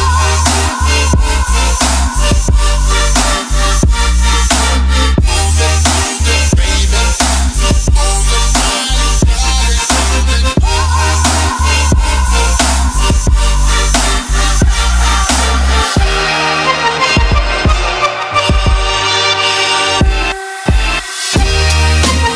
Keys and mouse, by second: 0.6 shift+a, 3.8 middle click, 4.2 click, 5.0 ctrl+middle click, 5.4 click, 6.0 shift+a, 10.0 click, 11.1 click, 11.6 click, 11.9 shift+a, 14.4 click, 15.8 click, 18.8 click, 19.1 click, 20.1 click, 20.6 click, 20.8 click, 21.7 click.